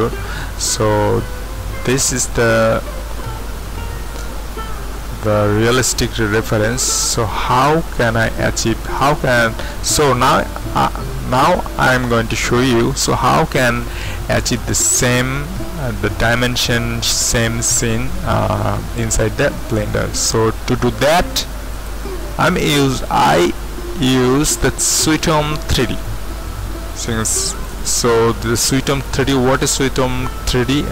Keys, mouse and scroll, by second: 0.5-1.9 scroll down 5, 1.9-2.8 scroll up 2, 2.8-3.3 scroll up 1, 3.3-6.2 scroll down 2, 14.6-15.8 drag, 16.3-18.3 scroll down 1, 19.7-21.9 drag, 25.7-27.7 drag, 29.5 click.